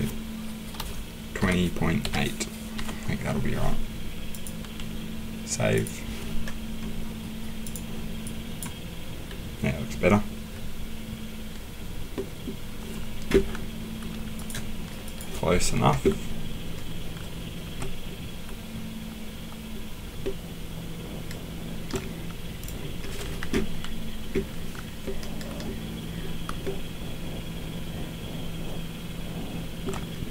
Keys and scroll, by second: 0.8-2.7 typing, 23.4 Escape.